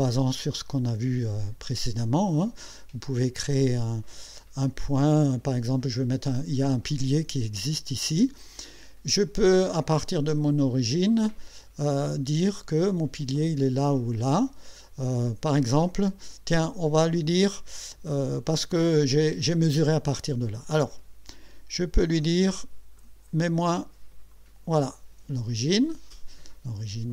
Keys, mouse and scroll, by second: 23.0 click, 24.3 click.